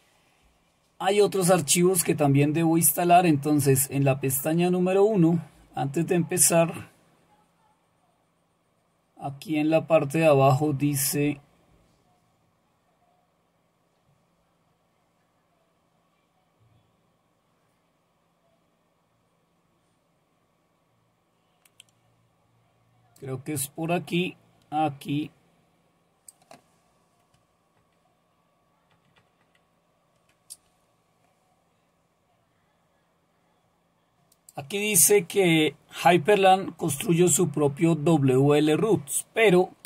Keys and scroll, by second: 27.8 ctrl++, 28.9 ctrl++, 29.1 ctrl++, 29.4 ctrl++.